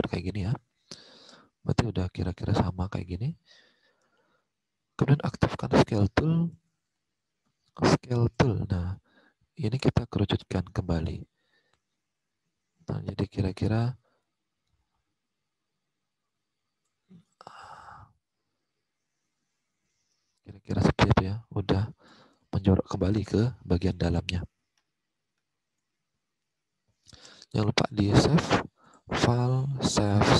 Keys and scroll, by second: 0.4 alt+Tab, 3.0 alt+Tab, 6.4 alt+Tab, 22.3 alt+Tab, 23.8 alt+Tab.